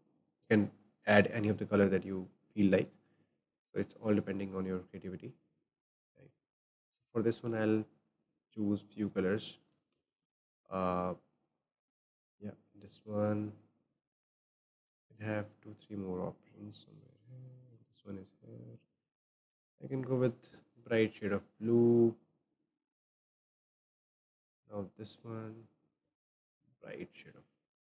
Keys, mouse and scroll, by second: 1.2-1.8 scroll up 5, 2.1 click, 9.0-10.1 drag, 9.9 ctrl+c, 10.7-12.0 drag, 12.0 ctrl+v, 12.8-19.5 drag, 24.3 click, 25.1-25.7 drag.